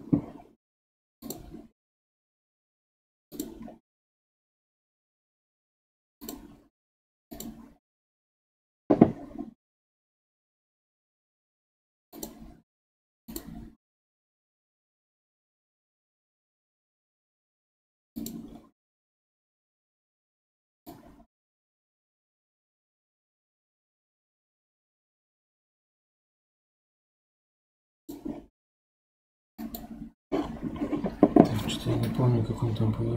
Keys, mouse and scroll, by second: 1.2-3.4 drag, 3.6 scroll up 3, 6.2-9.1 drag, 9.1-9.4 scroll down 4, 10.0-10.5 scroll up 5, 10.5 scroll down 1, 12.1-14.1 drag, 14.1-17.1 scroll up 5, 18.2-23.9 drag, 29.6-32.6 drag.